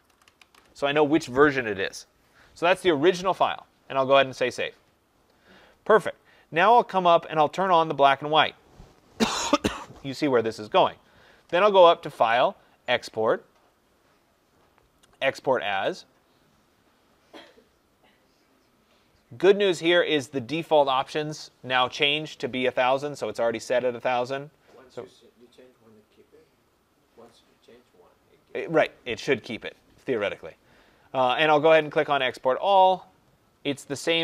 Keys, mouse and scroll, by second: 0.0-0.9 typing, 0.1-7.5 drag, 12.2 click, 15.8 click, 32.2 click, 33.8 click.